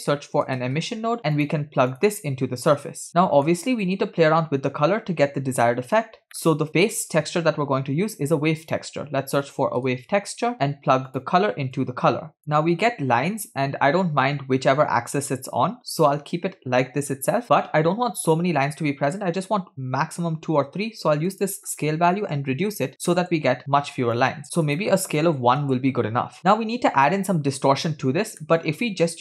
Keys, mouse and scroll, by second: 2.8 drag, 3.1-3.5 middle drag, 3.8 scroll up 1, 6.3 middle click, 8.2 shift+a, 11.8-12.4 drag, 12.9 scroll up 2, 14.4-15.0 scroll down 2, 17.1 scroll up 2, 21.3-23.2 drag, 24.2-25.7 drag, 26.4 middle click, 26.4-27.4 scroll down 2, 28.4 middle click, 28.6-29.2 scroll up 3.